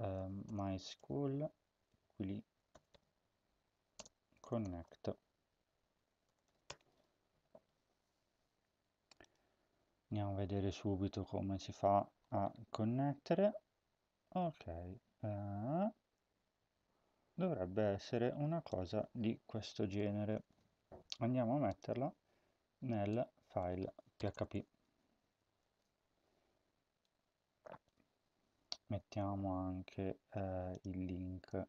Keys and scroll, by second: 0.0-6.9 typing, 20.3 ctrl+c, 24.1 Return, 24.2 Return, 24.7 Up, 25.5 ctrl+v, 27.8 Tab.